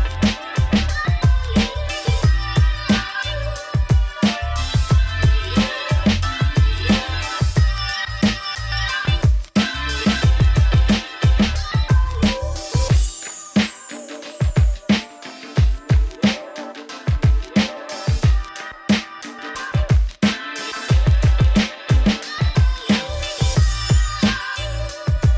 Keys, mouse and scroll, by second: 0.1 scroll down 2, 0.2-1.5 shift+middle drag, 1.5 shift+click, 2.1 ctrl+l, 2.5 middle click, 2.7 scroll up 3, 2.9-4.2 middle drag, 4.2-4.7 scroll up 1, 4.7-5.7 right drag, 5.7 click, 5.9 click, 6.3 scroll down 2, 7.1 click, 7.4 middle click, 7.9 scroll down 7, 8.1 click, 8.2-9.3 middle drag, 9.3 scroll up 2, 9.8 click, 10.9-11.9 middle drag, 11.9 click, 12.1 click, 12.8 ctrl+l, 13.2 click, 14.4-16.6 drag, 16.9-19.1 drag, 19.3 scroll down 3, 19.5-20.8 middle drag, 20.9 scroll up 4, 21.2 click, 22.1-25.3 drag.